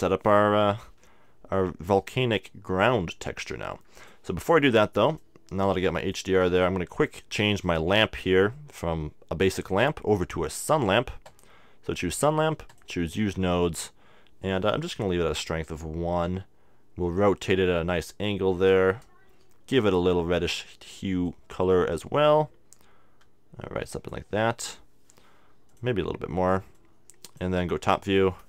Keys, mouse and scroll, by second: 3.0 middle click, 4.0-6.8 drag, 7.6-9.5 right drag, 9.7-14.6 drag, 16.3 r, 19.4-21.7 drag, 25.7-27.6 drag, 27.8 KP_7.